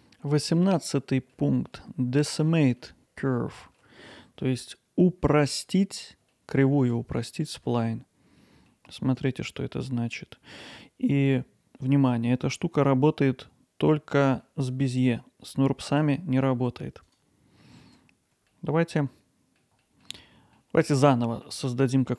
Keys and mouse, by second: 0.7 alt+middle click, 1.7 middle click, 2.8 ctrl+alt+middle click, 6.8 Tab, 7.6 Tab, 9.2-10.6 drag, 17.1 click, 18.5 alt+middle click, 18.9-20.0 middle drag.